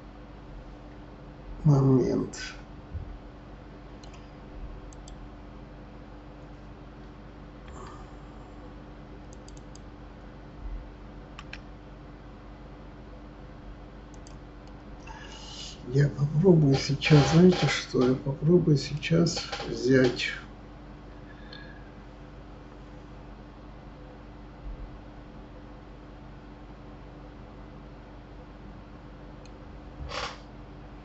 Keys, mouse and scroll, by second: 4.9 click, 7.6 Tab, 9.3 click, 9.5 click, 11.4 s, 14.6-17.7 middle drag, 18.9-22.0 middle drag.